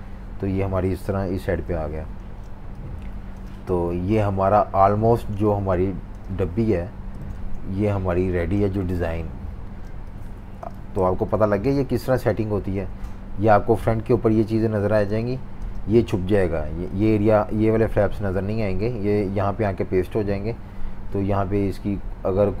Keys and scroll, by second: 1.1 super+-, 1.2 super+-, 1.4 super+-, 2.2-7.3 typing, 9.6-11.6 typing, 12.7 v, 14.8-16.1 typing.